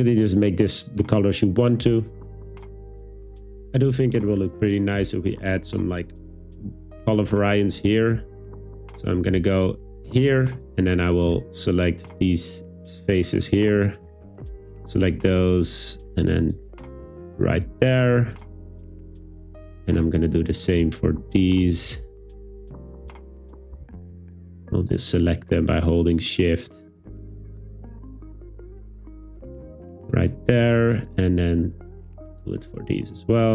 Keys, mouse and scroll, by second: 8.3 Tab, 10.4 3, 15.9 shift+click, 18.9 shift+right click, 23.8 super+z, 27.1 middle click, 31.4 shift+right click.